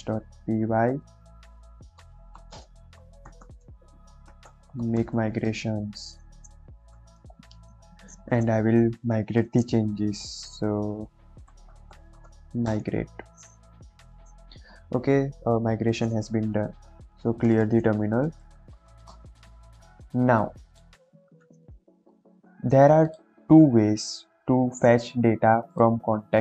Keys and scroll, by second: 0.0-5.3 typing, 8.8 Up, 9.3 BackSpace, 11.4-12.3 typing, 12.5 Return, 16.8-18.7 typing, 19.0 Return, 22.0 ctrl+j.